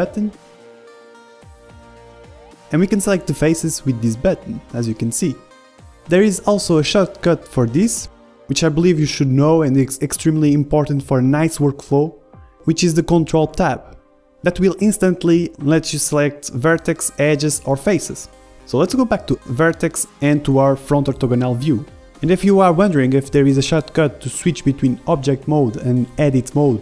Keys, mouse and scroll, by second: 0.6-2.7 drag, 1.5-3.2 middle drag, 2.1 g, 5.1-6.4 drag, 5.1 middle click, 5.4 g, 8.5-9.6 drag, 9.6-12.9 middle drag, 12.9 ctrl+Tab, 13.4 ctrl+Tab, 16.4 ctrl+Tab, 17.6-20.2 drag, 19.2 ctrl+Tab, 23.1 KP_1, 23.9-26.3 middle drag, 25.5 Tab.